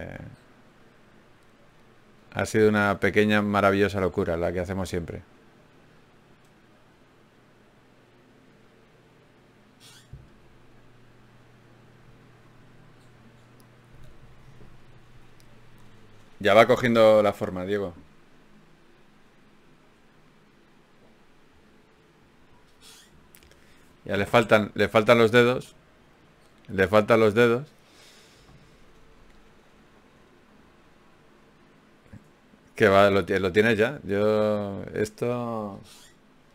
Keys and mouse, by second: 0.3-3.7 drag, 3.7 ctrl+r, 5.1 ctrl+Tab, 6.3 s, 7.3 g, 8.3-10.1 drag, 10.1 f, 10.5-12.1 middle drag, 14.8 KP_Divide, 18.5 a, 19.0 a, 20.2 ctrl+n, 20.5 z, 23.8 KP_Divide, 24.4 z, 25.2 z, 26.7 ctrl+Tab, 32.2 ctrl+Tab, 35.8 f.